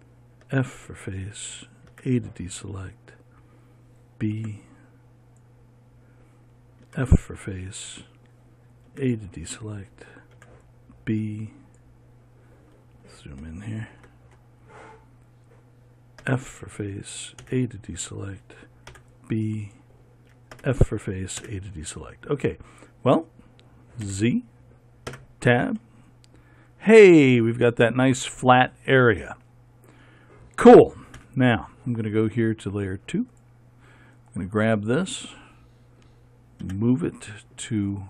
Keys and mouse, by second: 1.0 f, 4.9 b, 7.4 f, 9.4 a, 16.8 f, 18.0 a, 19.5 b, 21.1 f, 22.0 a, 24.6 z, 25.7 Tab, 31.7 KP_1, 35.3-37.2 drag, 35.3-37.2 right drag, 37.2 m.